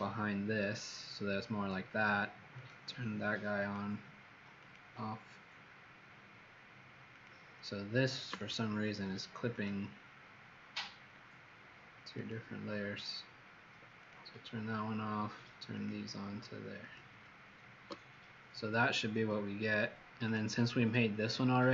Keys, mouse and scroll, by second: 8.3 alt+click, 9.4 alt+click, 12.1 alt+click, 13.9 click, 15.7 alt+click, 16.7 alt+click, 20.1 click, 20.9 alt+click.